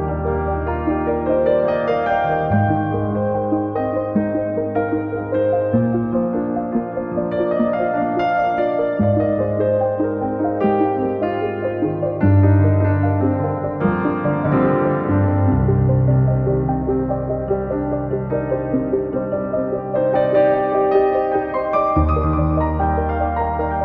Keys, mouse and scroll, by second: 4.5-5.7 drag, 5.7 scroll up 2, 6.4-7.5 drag, 8.2 click, 9.3 scroll up 5, 9.5 scroll down 8, 11.2 click, 11.4 scroll up 1, 11.5 scroll down 3, 11.8 click, 12.2 scroll up 1, 14.2 KP_0, 14.7 scroll down 1, 14.9 scroll up 1, 15.3 ctrl+z, 19.1 ctrl+z, 20.4 KP_Enter, 20.7 KP_0, 21.7 scroll down 2, 21.8 middle click, 22.4 KP_1, 22.6 scroll up 4.